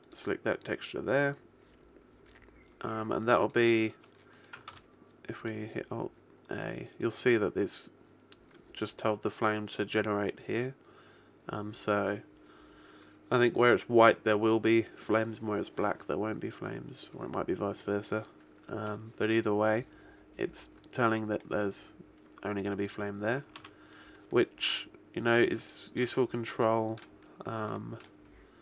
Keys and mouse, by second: 0.8-2.7 middle drag, 2.7 click, 4.6 alt+a, 7.0-8.4 right drag, 8.6 right click, 21.5-22.8 middle drag, 23.4 middle click, 23.8 alt+a, 25.2 middle click.